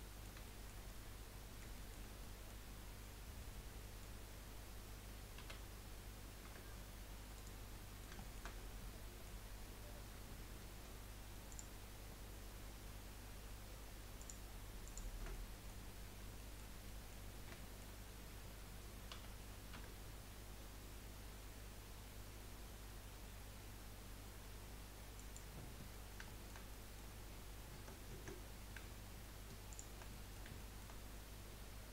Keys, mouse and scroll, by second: 5.4 s, 7.9 middle click, 8.5-9.0 scroll up 2, 9.0-11.5 middle drag, 11.5 alt+shift+click, 14.2 alt+shift+click, 14.8 alt+shift+click, 15.3-17.3 middle drag, 17.3 scroll down 2, 17.7-19.1 shift+middle drag, 19.1 s, 26.3-28.1 shift+middle drag, 28.1 ctrl+z, 29.7 alt+shift+click, 30.1-31.9 middle drag.